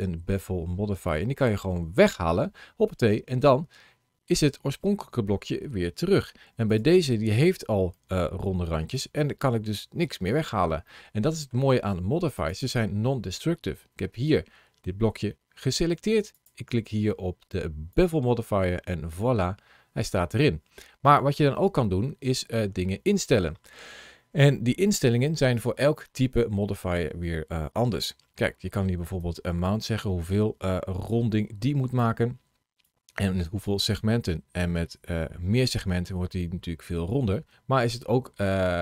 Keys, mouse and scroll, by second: 1.8 click, 3.0 middle click, 6.5 click, 7.2-7.8 scroll up 1, 7.8 middle click, 9.4-10.7 scroll down 1, 10.7 middle click, 12.2 click, 16.2 click, 20.8-21.4 scroll up 1, 21.4 middle click, 29.0 click, 32.7 click.